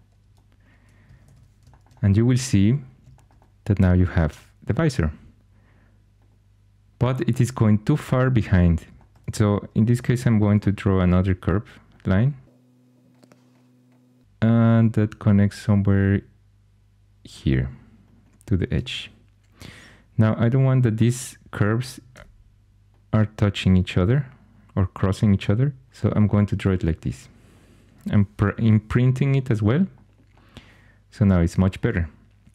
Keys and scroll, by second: 1.2 shift+super+e, 10.9 ctrl+super+c, 20.2 1, 22.1 g, 26.6 2, 28.3 Caps_Lock.